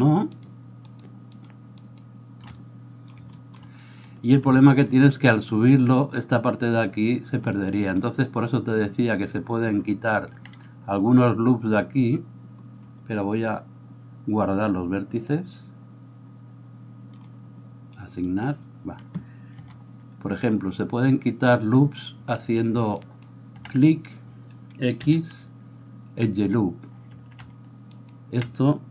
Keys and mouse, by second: 2.0-15.3 shift+middle drag, 15.3-28.9 drag, 19.6 a, 23.0 alt+right click, 25.0 x, 28.0 alt+right click.